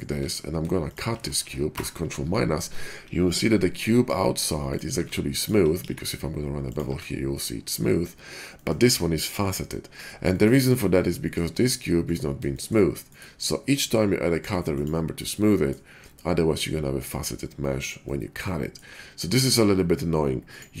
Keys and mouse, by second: 0.0 Tab, 1.6 ctrl+KP_Subtract, 4.0-10.1 drag, 4.6 middle click, 4.6 right click, 4.9 Tab, 5.7 ctrl+b, 6.8 Tab, 10.1-15.6 shift+middle drag, 15.6-20.8 drag.